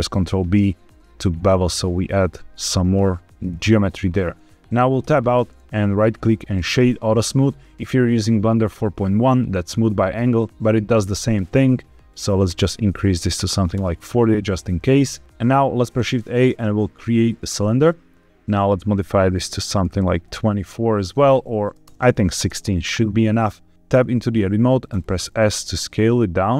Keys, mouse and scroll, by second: 0.1 ctrl+b, 1.6-2.2 scroll down 1, 2.2-3.3 scroll down 1, 3.4 click, 4.9 Tab, 5.8-7.2 right drag, 12.0-13.7 drag, 15.7 shift+a, 18.5-22.4 drag, 21.8 BackSpace, 21.9 BackSpace, 23.7 Tab, 23.9 Tab, 24.8 s.